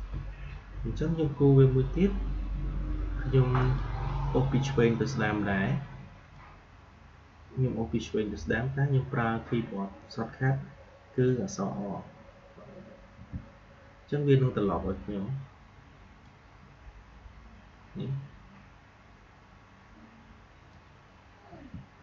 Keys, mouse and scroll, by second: 3.5 click, 6.3-13.1 drag, 13.1 r, 20.6 click, 21.4-22.0 typing.